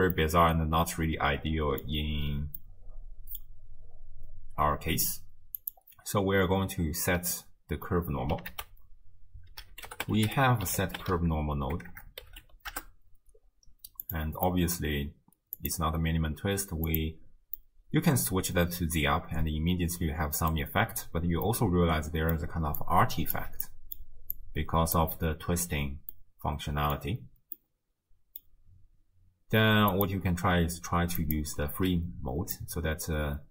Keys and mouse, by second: 0.3-1.8 middle drag, 0.3 d, 2.7 click, 5.6 click, 8.5 ctrl+a, 11.9 BackSpace, 14.5 middle click, 15.6-17.1 drag, 17.7-20.6 middle drag, 21.5-22.4 middle drag, 22.4 d, 22.8 click, 23.4 d, 23.7 middle click, 24.0 d, 24.4 click, 25.0 d, 26.3-27.0 middle drag, 26.3 d, 27.6-28.5 drag, 29.9-31.4 drag, 32.6-33.5 drag.